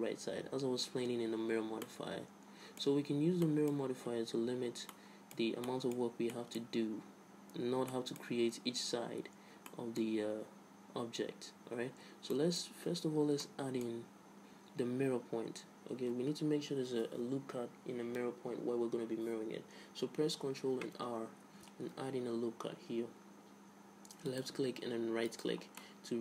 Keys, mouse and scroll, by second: 2.0-12.5 middle drag, 15.3-19.1 middle drag, 21.5 ctrl+r, 25.9-26.2 middle drag.